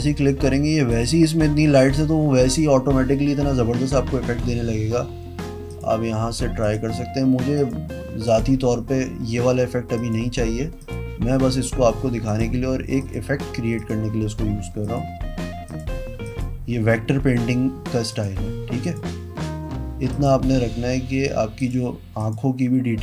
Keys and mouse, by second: 5.9 click, 6.8 click, 7.7 click, 8.4 click, 10.2 click, 11.0 click, 11.7 click, 12.5 click, 13.2 click, 14.0 click, 15.0 click, 15.9 click, 16.4 click, 18.3 click, 19.0 click, 20.3 click, 21.8 click, 22.4 click.